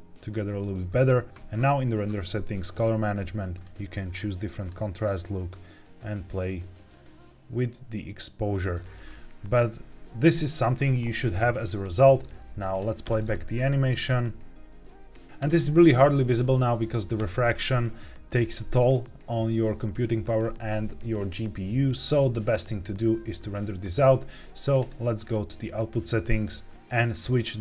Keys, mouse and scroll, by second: 0.8 click, 1.4-2.5 scroll down 3, 2.5 drag, 2.7-3.4 scroll down 2, 3.4-4.6 drag, 5.5-8.6 drag, 9.0 scroll down 1, 12.6 click, 13.0 space, 15.2 click, 15.4 space, 17.1 space, 24.7 click, 26.9-27.6 drag.